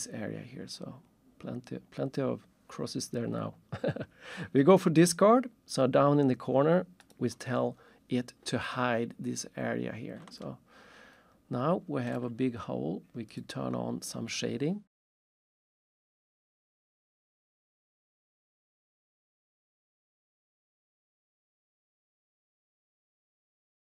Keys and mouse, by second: 7.0 click, 10.4 alt+shift+click, 15.4 alt+shift+click, 18.7 alt+shift+click, 22.8 alt+shift+click.